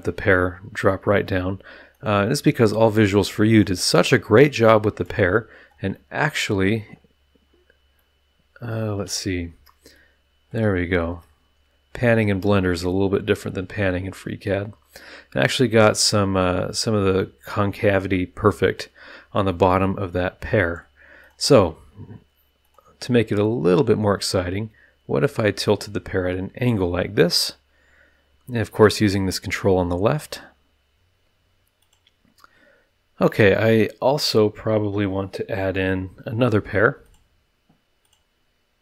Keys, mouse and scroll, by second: 0.7 click, 1.9 click, 3.5 click, 4.2-5.0 middle drag, 5.0 drag, 5.4-5.9 scroll up 1, 5.9 middle click, 6.7-7.3 scroll down 1, 7.4 scroll up 1, 7.9-9.4 drag, 9.9 shift+drag, 10.2 shift+middle click, 10.6 shift+scroll up 1, 11.2-12.3 shift+middle drag, 12.6-14.7 shift+middle drag, 18.8-19.4 scroll down 4, 19.5-20.7 middle drag, 20.7 drag, 21.2 click, 22.6 click, 23.7-25.4 drag, 25.7 click, 25.9-26.5 middle drag, 26.5 click, 29.7 click, 30.9 click, 31.8 click, 33.2 click, 37.0 click, 38.0 click.